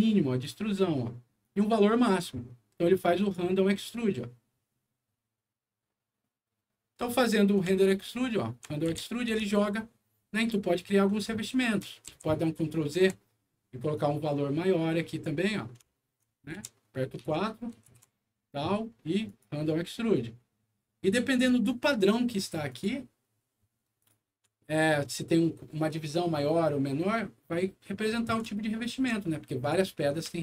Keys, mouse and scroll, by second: 1.4 click, 3.1 click, 7.8 alt+middle click, 8.9 F4, 9.4-11.1 alt+middle drag, 11.4 alt+middle click, 12.0 ctrl+z, 13.9-15.2 ctrl+drag, 15.8 alt+middle click, 16.5 F4, 17.1 4, 19.2 ctrl+click, 22.6 click, 23.4 middle click, 23.9 click, 24.5 alt+middle click, 27.9 alt+middle click, 28.7 alt+middle click, 29.5 alt+click, 30.3 alt+middle click.